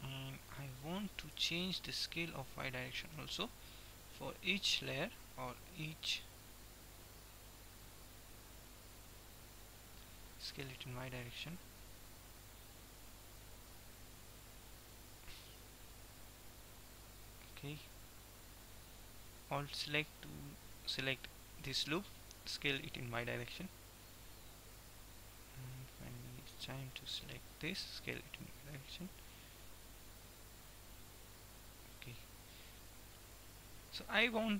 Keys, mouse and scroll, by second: 1.4 s, 4.4-9.2 drag, 9.2 middle click, 9.9-11.0 drag, 10.5 s, 13.5-15.4 middle drag, 15.4 x, 16.2 x, 20.2-22.0 middle drag, 22.0 s, 26.5-28.2 right drag, 27.9 s, 32.2-34.4 middle drag, 33.5 Tab.